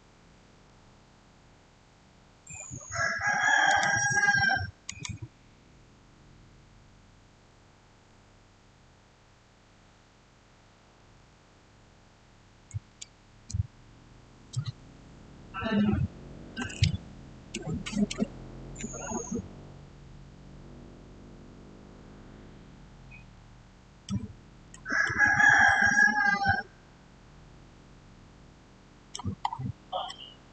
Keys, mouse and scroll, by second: 3.5 click, 8.0 click, 8.0 5, 10.5 0, 11.0 Return, 23.2-24.9 middle drag, 24.9-27.8 shift+middle drag, 27.8-28.5 shift+scroll down 1, 29.4 shift+scroll up 1, 29.9-30.5 shift+middle drag.